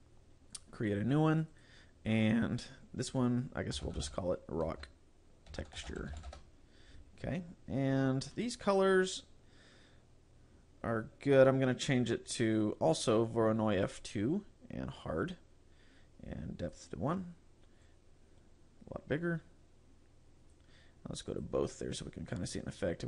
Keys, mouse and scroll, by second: 0.6 click, 1.7 click, 7.6-9.3 scroll down 3, 9.7-11.3 scroll down 3, 11.9 click, 15.0 click, 15.3 click, 16.7 click, 17.9 click, 21.3 click.